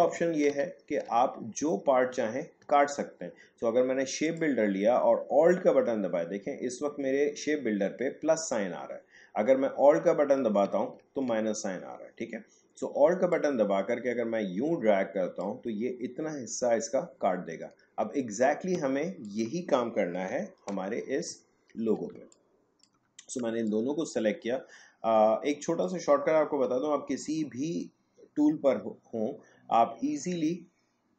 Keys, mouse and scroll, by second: 4.3 click, 9.7 click, 13.3-19.2 alt+drag, 20.3 Delete, 21.4 alt+scroll down 1, 22.1 space, 22.3 click, 23.5 space, 23.7-28.9 ctrl+drag.